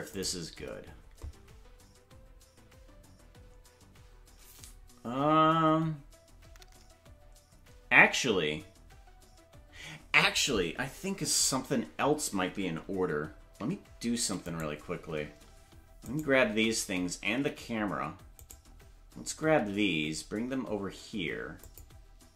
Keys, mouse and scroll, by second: 0.1 click, 16.1-17.3 shift+right drag, 17.3 g.